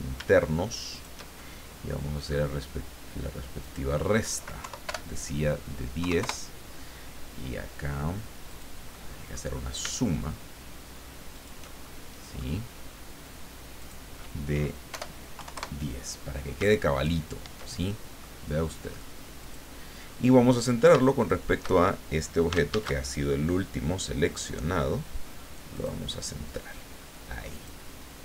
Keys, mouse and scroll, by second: 0.9 shift+click, 1.4 shift+middle click, 3.6 click, 4.6 Left, 4.9 BackSpace, 6.0 KP_3, 6.2 KP_Enter, 8.5 click, 8.9 middle click, 11.3 shift+click, 11.8 shift+middle click, 13.8 click, 14.9 BackSpace, 15.4 KP_1, 15.5 KP_Enter, 17.0-17.8 ctrl+scroll down 2, 17.8 ctrl+middle click, 19.4 click, 21.2 shift+click, 22.7 ctrl+shift+a, 25.7 click, 27.5 click.